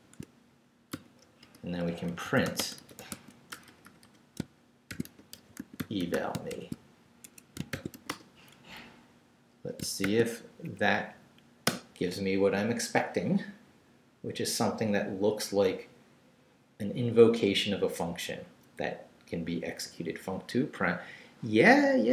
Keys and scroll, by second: 0.9-8.4 typing, 1.4 Return, 7.2 shift+Escape, 10.0 shift+;, 10.5 shift+Up, 11.6 Return.